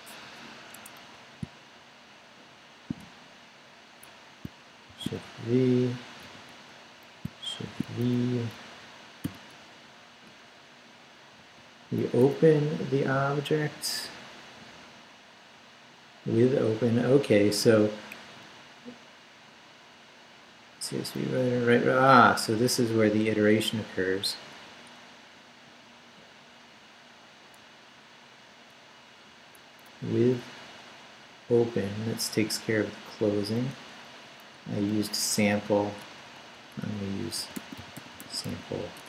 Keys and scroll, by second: 0.7 Escape, 1.0 Left, 3.3 shift+Left, 3.9 Left, 4.0 Down, 4.9 shift+v, 5.2 shift+Down, 6.1 Down, 6.2 shift+,, 6.9 shift+Up, 7.6 shift+v, 7.9 shift+Down, 8.5 shift+Down, 9.2 shift+., 10.2 shift+Up, 12.0 Up, 13.1 Down, 17.4 Down, 18.2 Up, 19.7 Down, 20.6 Up, 21.2 Down, 21.8 Right, 23.8 Right, 25.5 Left, 27.6 Left, 29.3 Right, 29.9 Up, 30.7 Right, 32.3 Right, 34.9 i, 35.2 BackSpace, 37.1-39.0 typing.